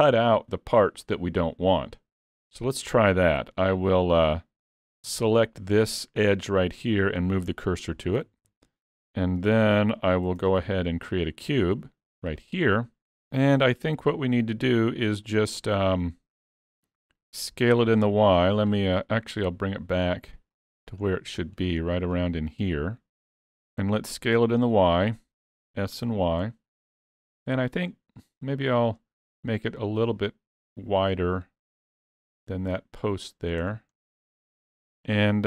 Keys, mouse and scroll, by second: 3.4 Tab, 4.6 2, 5.5 alt+click, 7.2 shift+s, 8.2 alt+a, 8.4 Tab, 9.6 alt+a, 10.4 shift+a, 14.0 click, 15.3 middle click, 16.4-16.9 scroll down 3, 16.7 middle click, 17.3 scroll up 1, 18.3-18.7 scroll up 2, 18.7 click, 21.1 middle click, 21.8 scroll up 3, 22.1 middle click, 25.7 s, 33.7-34.0 scroll down 2, 34.0 middle click, 34.8-35.2 scroll down 4, 35.2 shift+middle click.